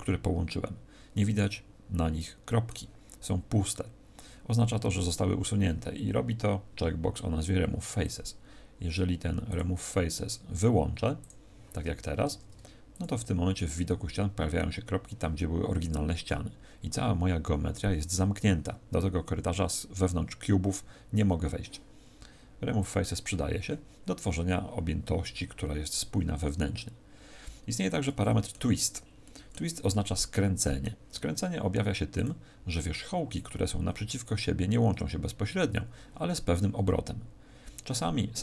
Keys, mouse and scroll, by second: 1.4 middle click, 8.0 click, 9.4 click, 12.2 ctrl+Tab, 12.2 click, 22.8 click, 28.0 middle click, 28.7 z, 29.2 middle click, 29.8 middle click, 32.1 click.